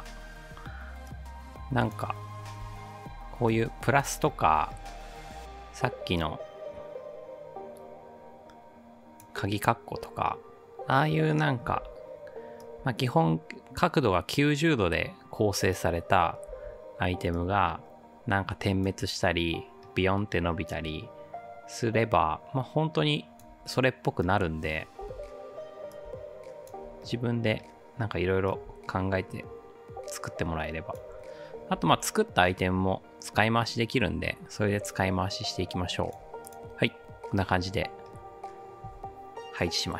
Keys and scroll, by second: 2.6 ctrl+d, 11.7 ctrl+d, 16.5 ctrl+d, 25.0 ctrl+d, 31.8 ctrl+d.